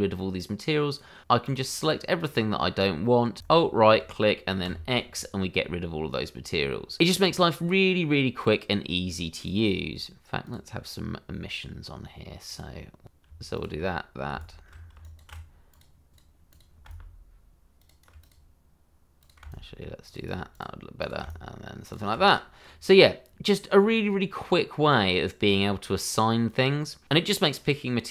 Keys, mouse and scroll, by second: 1.9 double click, 2.0 click, 3.4 alt+right click, 4.6 x, 5.1 click, 5.7-6.8 scroll up 1, 6.8 scroll down 1, 7.0 ctrl+z, 7.5 ctrl+z, 8.4 click, 10.4 click, 14.4 right click, 15.7 click, 16.6 double click, 16.9 right click, 17.8 click, 19.2 click, 19.5 right click, 21.1 double click, 21.2 alt+right click, 22.6-23.2 scroll up 1, 23.2 scroll up 1, 23.2-23.8 scroll down 1, 23.8 middle click, 26.4 click, 27.3-27.7 scroll up 1, 27.7 middle click.